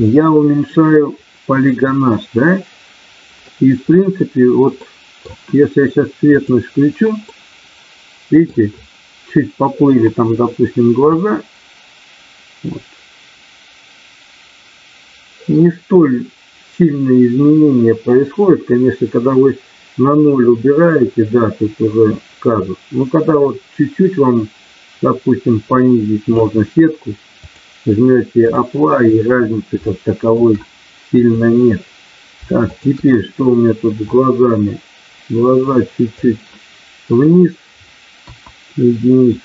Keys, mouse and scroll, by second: 1.7-3.5 middle drag, 4.7 middle click, 6.5 click, 7.3-8.5 middle drag, 11.3-26.4 drag, 27.4-28.7 drag, 29.8 shift+middle click, 31.1 click, 32.8 shift+click, 34.1-36.1 drag, 38.1 KP_1.